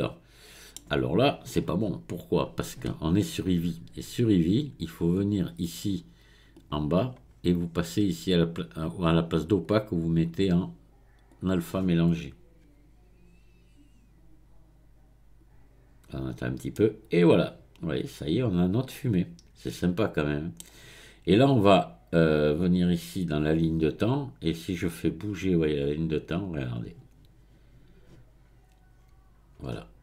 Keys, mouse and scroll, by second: 6.7 click, 7.3-7.9 scroll down 1, 7.9-9.6 scroll down 1, 9.6-12.6 drag, 16.8-19.8 middle drag, 22.8-26.6 drag.